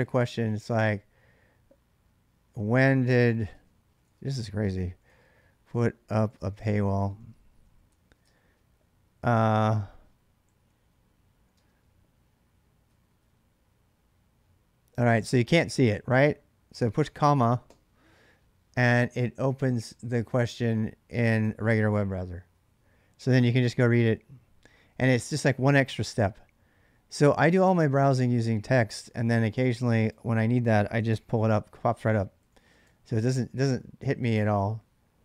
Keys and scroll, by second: 4.1-8.5 typing, 10.0-13.2 typing, 30.9 ctrl+c, 31.9-33.1 typing, 33.4 Return.